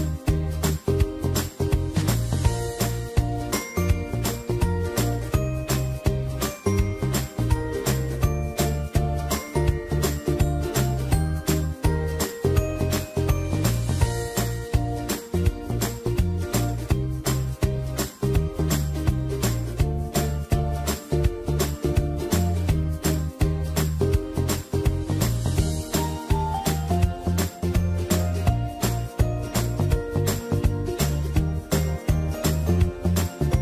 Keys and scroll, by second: 3.3 Down, 3.5 Down, 16.0 ctrl+z, 19.7-21.2 typing, 23.4 ctrl+z, 31.0 ctrl+shift+Delete.